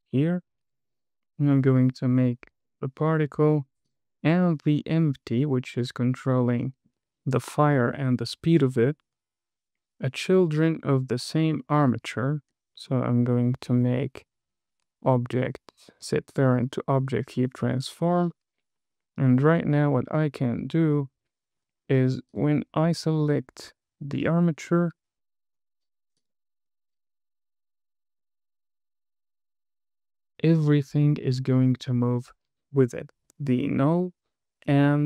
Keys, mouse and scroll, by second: 2.1 click, 4.2 super+click, 5.1-5.9 scroll down 3, 6.2-6.8 scroll up 3, 7.0 shift+middle click, 8.0 shift+middle click, 11.6 super+click, 13.2 super+p, 18.2 click, 19.1-19.9 scroll up 2, 19.9 space, 22.0 space, 22.6 click, 25.0 g, 26.6 click, 27.0 space, 33.7 space.